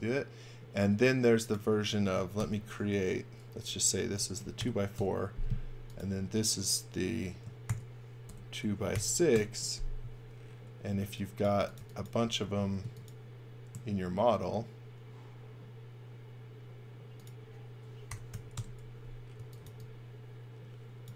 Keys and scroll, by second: 2.4 shift+g, 3.6-5.1 typing, 7.7-9.4 typing, 10.9-12.5 typing, 17.8-19.6 typing.